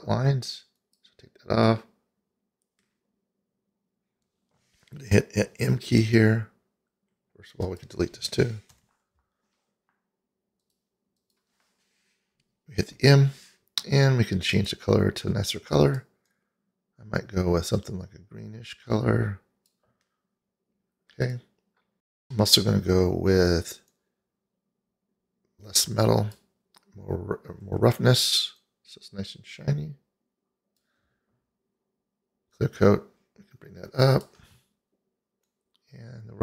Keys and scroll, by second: 6.1 n, 8.8 Delete, 13.1 m.